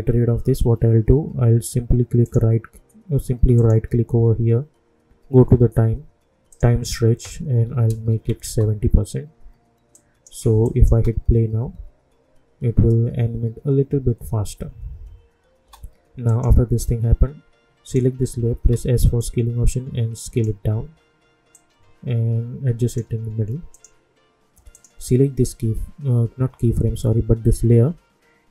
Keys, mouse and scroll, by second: 2.2 right click, 6.5 click, 8.4 Return, 9.9 click, 10.9 space, 15.6 space, 16.2 click, 18.6 s, 19.2-23.7 drag.